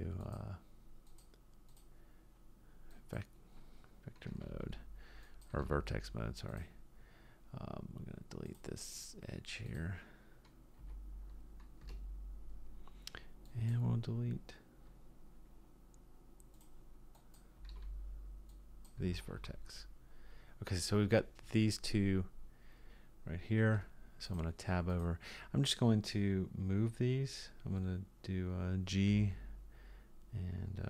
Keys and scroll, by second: 4.3 x, 5.5 x, 10.8 x, 17.6 x, 19.0 x, 23.7 Tab, 29.1 g.